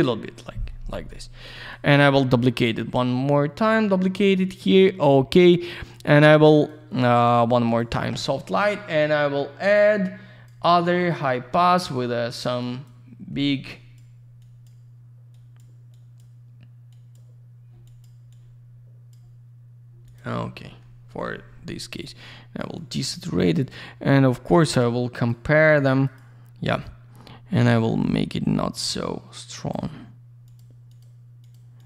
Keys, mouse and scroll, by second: 1.4 click, 1.5 click, 1.6 right click, 1.7 double right click, 3.3 click, 4.4 click, 4.5 click, 5.3 click, 6.5 click, 6.6 click, 7.6 click, 7.7 click, 9.0 click, 11.0 click, 11.0 click, 12.6 click, 13.7 click, 14.4 click, 15.3 click, 15.9 click, 16.9 click, 17.8 click, 18.0 click, 18.3 click, 20.0 click, 20.1 click, 21.0 ctrl+u, 22.1 click, 22.7 click, 22.9 click, 23.5 click, 23.6 click, 24.6 click, 24.8 click, 25.1 click, 25.2 double click, 25.6 click, 25.7 click, 26.0 click, 26.1 double click, 27.7 click, 28.1 click, 30.4 click, 30.5 click, 30.8 click, 31.0 double click, 31.4 click, 31.5 click, 31.7 click.